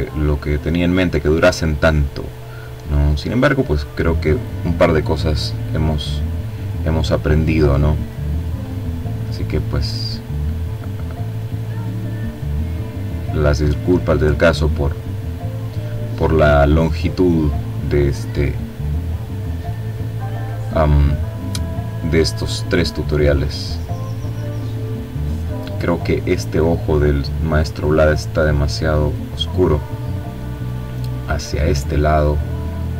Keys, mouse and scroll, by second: 1.5 click, 3.4-5.3 drag, 6.4 click, 7.6 click, 9.9 click, 10.7-14.2 drag, 14.3 click, 15.2 click, 17.6 click, 19.0 click, 20.0 click, 23.3 click, 25.8 click, 27.1 click, 31.3-32.9 drag.